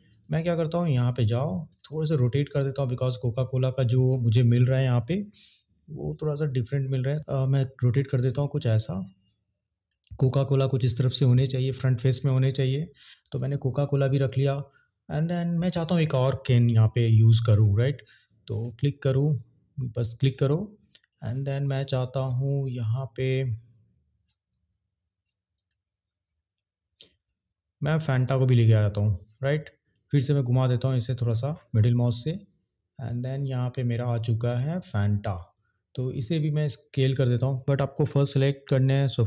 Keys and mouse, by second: 0.2 click, 0.6 click, 2.6 click, 4.0 ctrl+z, 6.1 click, 10.8 click, 20.3 click, 21.7 click, 25.5 click, 28.3 click, 36.1 click.